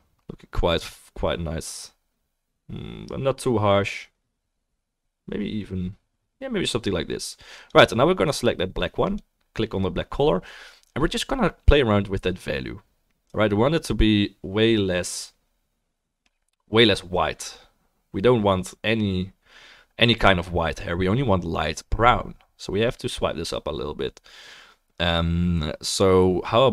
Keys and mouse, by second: 5.1 drag, 5.1 right drag, 6.2 click, 6.2 middle click, 6.2 right click, 7.0-7.7 drag, 7.0-7.7 middle drag, 7.0-26.7 right drag, 8.2-9.2 drag, 8.2-9.2 middle drag.